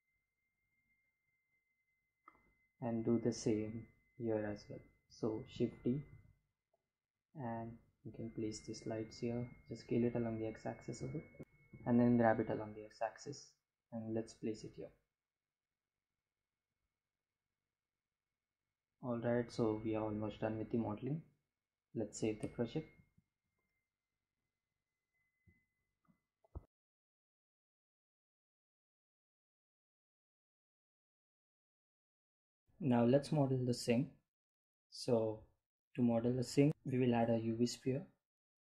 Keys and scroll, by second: 3.6 shift+d, 4.2 z, 7.4 s, 7.7 x, 12.7 g, 12.9 x, 23.9 ctrl+s, 37.4 shift+a.